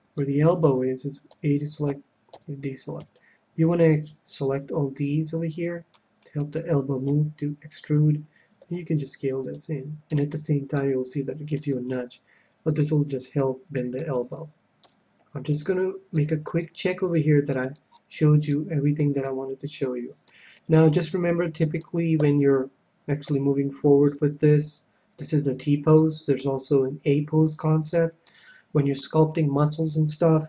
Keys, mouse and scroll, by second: 0.0-1.8 middle drag, 1.3 a, 1.8 a, 2.3 a, 2.9 c, 6.4-9.7 right drag, 7.3 e, 8.7 s, 9.7-11.1 drag, 10.3 Tab, 10.8-12.4 middle drag, 11.6 Tab, 12.7-15.2 middle drag, 14.8 KP_1, 15.6-22.3 middle drag, 23.2 a, 24.1 KP_1, 26.0-27.8 middle drag, 27.9-29.6 middle drag.